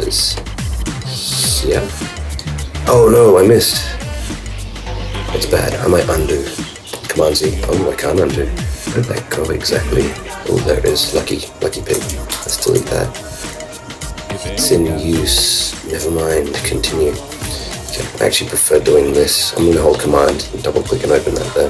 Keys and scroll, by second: 11.8 super+Down, 11.9 super+BackSpace, 12.7 shift+super+Return, 13.6 super+Return, 17.2 super+Up.